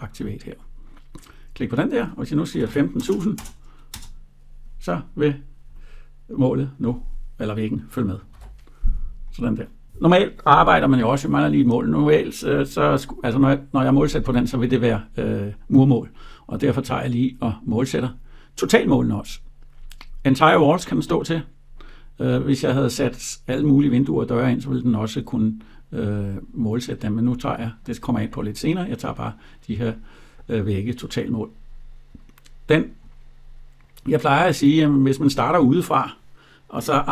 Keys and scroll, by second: 3.7 Return, 8.1 ctrl+z.